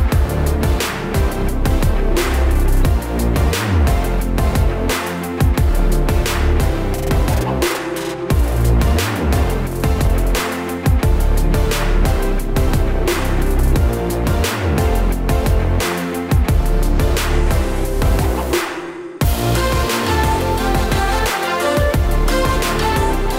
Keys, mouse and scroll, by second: 0.3 alt+click, 0.8 click, 1.3 shift+click, 1.9 click, 2.2 shift+click, 2.8 shift+click, 3.7 shift+click, 4.2 shift+click, 5.1 shift+click, 6.7 shift+click, 7.0-9.3 shift+click, 10.2 w, 11.0 e, 12.3 middle click, 12.7 Tab, 13.0 click, 13.8 shift+d, 14.4 scroll down 4, 14.6 middle click, 15.2 click, 15.6 click, 17.1 click, 17.5 shift+click, 18.8 shift+d, 19.5 click, 22.0 middle click, 22.9 click.